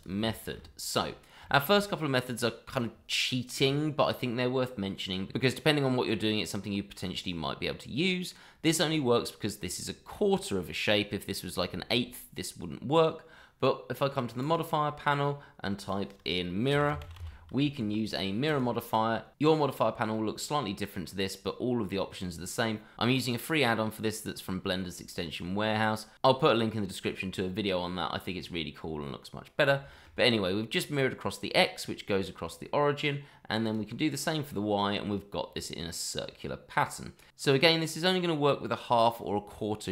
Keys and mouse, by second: 0.2-0.5 shift+middle drag, 1.4 shift+middle drag, 1.8-2.8 middle drag, 4.9 click, 5.7 shift+middle drag, 6.9-8.3 middle drag, 8.9 middle drag, 10.1-10.9 middle drag, 11.7 shift+middle drag, 12.1-13.0 middle drag, 14.4 click, 15.8-18.6 drag, 17.1 r, 29.9 shift+middle drag, 30.2-31.5 middle drag, 32.1 middle click, 33.6 click, 34.5-37.2 middle drag, 37.4 shift+middle drag, 38.1-38.5 middle drag.